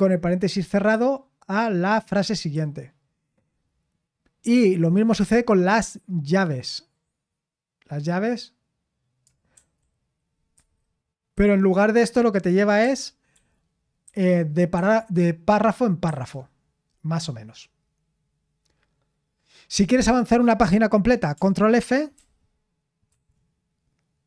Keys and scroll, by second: 0.9 typing, 2.5 typing, 9.5-11.3 typing, 12.8-14.7 typing, 16.0 typing, 19.1-19.7 scroll down 1, 22.1 ctrl+f, 23.0 ctrl+f.